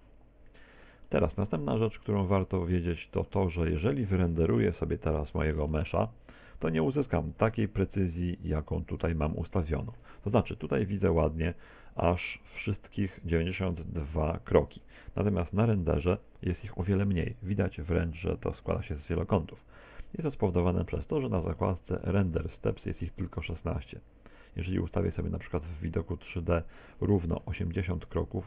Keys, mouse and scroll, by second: 1.1 middle click, 2.3 middle click, 4.7 KP_0, 5.7 Tab, 6.4 right click, 7.4 g, 9.0 click, 10.3 z, 12.3 right click, 25.4 Escape, 26.3 click.